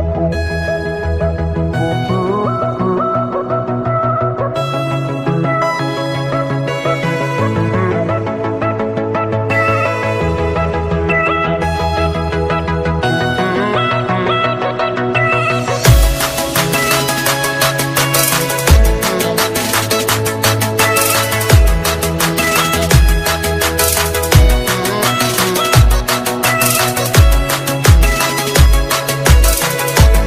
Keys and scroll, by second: 1.7 ctrl+space, 5.9 ctrl+e, 29.7 ctrl+space.